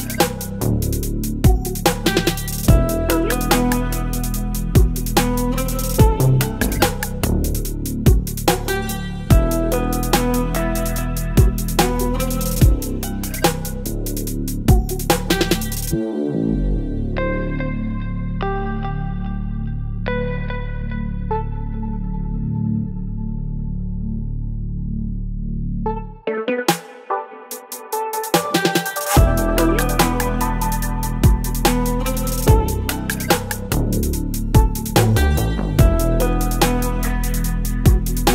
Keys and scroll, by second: 0.1 Return, 13.8 ctrl+t, 32.0 ctrl+t.